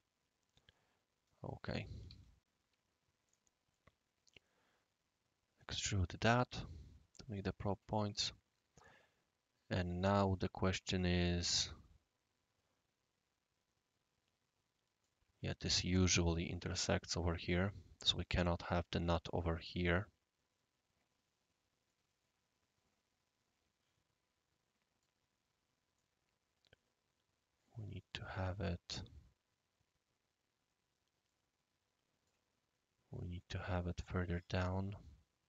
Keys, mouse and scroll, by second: 2.0 typing, 3.2-3.7 drag, 3.7-5.5 middle drag, 5.5-6.8 right drag, 7.3-7.8 drag, 8.1-15.0 right drag, 15.6 scroll up 1, 15.7 scroll down 1, 16.0 scroll up 1, 16.0 scroll down 1, 16.1-18.9 scroll up 1, 21.8-25.0 right drag, 25.3-25.8 scroll down 3, 25.9-28.3 right drag, 28.9 click, 31.2-32.2 right drag, 34.5 click, 34.8-35.4 right drag.